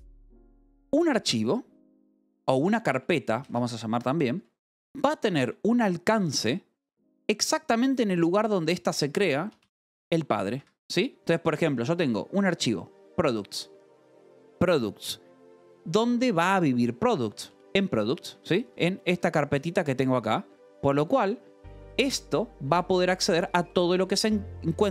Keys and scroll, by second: 0.4 shift+v, 2.9 Escape, 3.2 j, 3.9 Escape, 4.3 k, 8.7 shift+v, 9.1 Escape, 10.1 shift+v, 10.5 Escape, 10.9 j, 12.0 shift+v, 18.0 shift+v, 18.3 Escape, 18.6 v, 19.0 Escape, 20.0 shift+v, 20.4 Escape, 20.8 j, 21.7 shift+v, 22.6 Escape, 22.9 j, 23.2 j, 24.6 Escape.